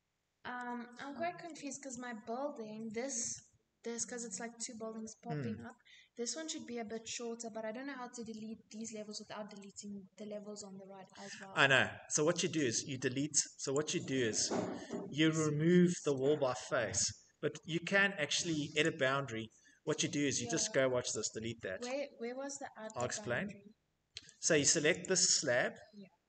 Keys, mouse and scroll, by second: 0.8 click, 2.7 shift+middle click, 3.5 middle click, 3.5 middle click, 9.5 middle click, 9.5 middle click, 9.6 middle click, 11.1 middle click, 13.1 click, 13.8 middle click, 13.9 middle click, 14.0 middle click, 18.2 right click, 19.3 middle click, 19.3 middle click, 19.6 scroll, 20.0 Tab, 21.2 Delete, 23.4 Escape, 23.6 Escape.